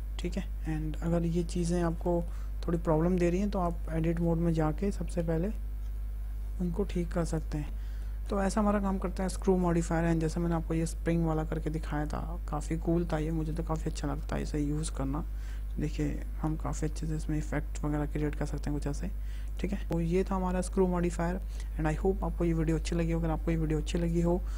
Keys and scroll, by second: 3.0 `, 5.6 Tab, 10.2 Delete, 15.8 g, 16.3 z.